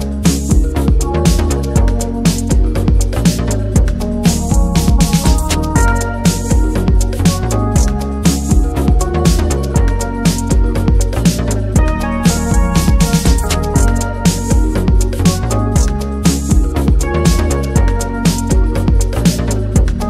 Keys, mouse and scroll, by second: 0.2 click, 0.3-0.7 scroll down 1, 0.7 click, 1.1 ctrl+z, 1.5 Tab, 4.0 p, 4.7 Tab, 5.2 scroll up 2, 5.7 Left, 6.0 Left, 6.5 Left, 7.1 Left, 7.4 shift+middle click, 7.7 Left, 8.5 shift+middle click, 8.8 Left, 9.3 Left, 9.8 click, 10.2 click, 10.8 click, 11.0 middle click, 11.8 click, 11.9 shift+middle click, 12.2 click, 12.4-13.9 middle drag, 13.9 click, 14.1-16.3 middle drag, 16.3 F4.